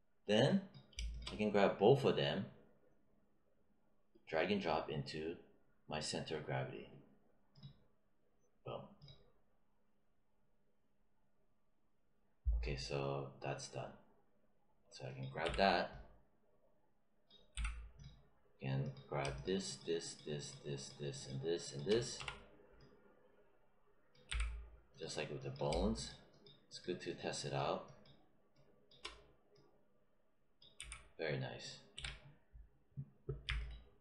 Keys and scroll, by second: 15.4 w, 17.4 z, 22.1 e, 24.2 z, 30.7 z, 31.9 w.